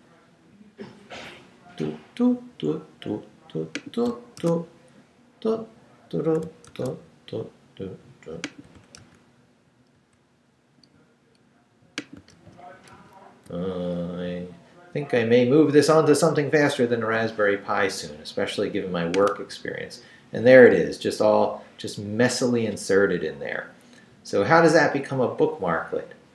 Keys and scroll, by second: 4.4 super+r, 6.7 super+r, 9.0 super+r, 12.3 super+r.